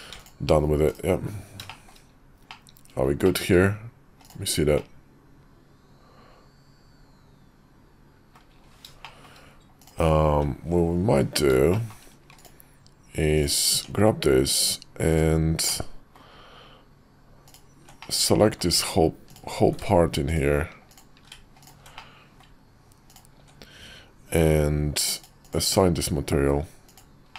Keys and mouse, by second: 0.8 /, 1.7 shift+middle click, 2.4-3.3 middle drag, 4.1 click, 4.7-8.3 middle drag, 9.0 shift+middle drag, 9.7 click, 10.2 `, 11.0 KP_5, 11.7 shift+middle click, 12.3 click, 13.6 Tab, 15.0 click, 15.6 middle click, 17.3 ctrl+click, 18.0 middle click, 18.7 ctrl+z, 19.2 click, 20.2 click, 21.5 click, 21.9 middle click, 23.0 ctrl+click, 25.1 click, 26.8 click, 27.3 middle click.